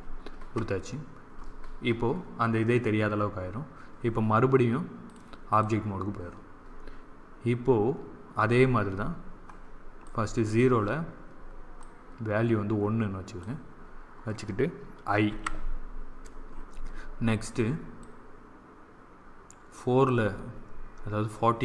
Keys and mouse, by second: 5.0-8.4 drag, 9.9-13.6 drag, 15.2 i, 17.9-20.0 drag.